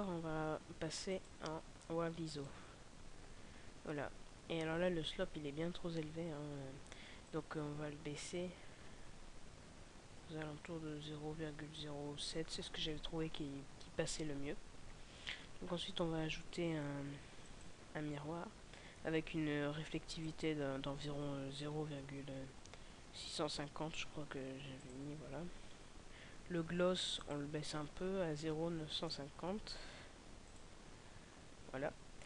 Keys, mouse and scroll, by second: 15.4 scroll down 2, 17.6 click.